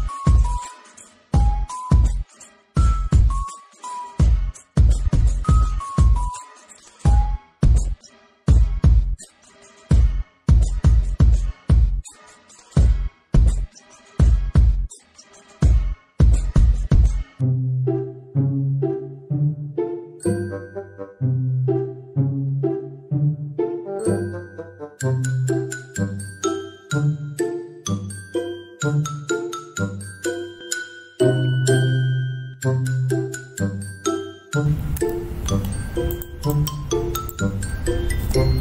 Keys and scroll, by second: 4.6 ctrl+z, 5.3 ctrl+z, 7.7 ctrl+alt+z, 8.5 ctrl+z, 8.9 ctrl+z, 10.0 ctrl+z, 10.6 ctrl+z, 11.0 ctrl+z, 11.9 ctrl+z, 13.1 ctrl+z, 13.6 space, 14.4 alt+space, 15.1 alt+space, 15.4 alt+space, 16.1 Delete, 16.8 ctrl+t, 17.7 alt+space, 18.5 ctrl+z, 18.7 ctrl+shift+x, 19.0 ctrl+shift+z, 19.4 ctrl+shift+z, 19.5 ctrl+shift+z, 21.7 ctrl+z, 23.3 ctrl+z, 23.8 ctrl+z, 24.8 ctrl+z, 25.7 ctrl+z, 26.2 ctrl+z, 26.5 ctrl+z, 26.9 ctrl+z, 27.2 alt+space, 27.7 ctrl+z, 29.4 ctrl+z, 30.3 ctrl+z, 31.1 alt+space, 35.3 ctrl+j.